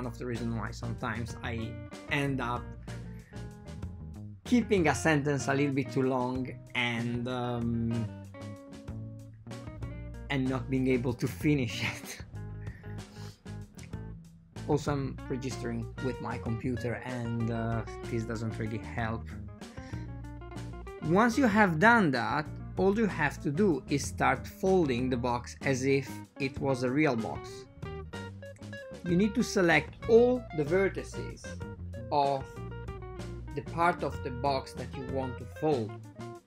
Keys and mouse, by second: 2.6 ctrl+middle click, 3.2 ctrl+middle click, 4.8 click, 5.1 shift+s, 6.1 shift+s, 8.4 Tab, 8.9-10.9 drag, 12.7 click, 13.7-14.7 drag, 15.6-17.0 drag, 16.6 KP_Divide, 22.6 ctrl+shift+middle click, 23.2 shift+middle click, 23.8 Tab, 24.8 ctrl+shift+middle click, 26.3 click, 29.0-30.5 drag, 33.6 click, 33.9 right click, 33.9 click, 34.5 a, 35.7 a, 36.3 a, 36.3 c.